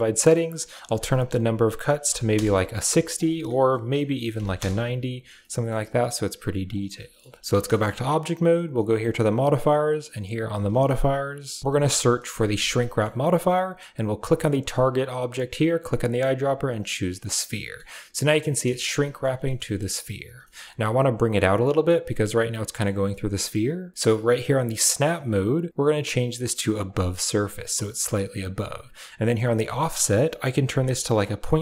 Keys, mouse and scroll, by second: 0.7 click, 4.4 click, 5.2 middle click, 6.5 click, 6.8 shift+middle click, 7.4 middle click, 7.5 shift+Tab, 7.5 shift+middle click, 9.3 click, 9.5 click, 10.2-11.7 drag, 12.7 middle click, 14.7 click, 17.3-17.6 middle drag, 18.1 middle drag, 18.4 middle click, 18.6 shift+middle click, 18.9 middle click, 19.0 scroll up 1, 19.3 shift+middle click, 19.6 middle click, 20.4 shift+middle click, 22.7 middle click, 24.7-26.8 drag, 29.3-31.6 drag.